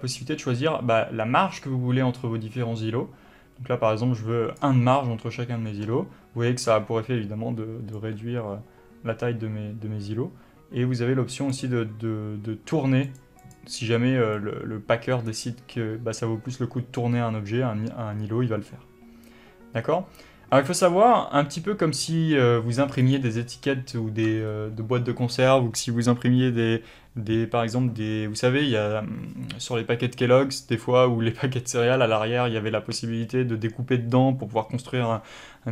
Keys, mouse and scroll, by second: 0.0-13.4 drag, 13.7 click, 14.6-23.4 drag.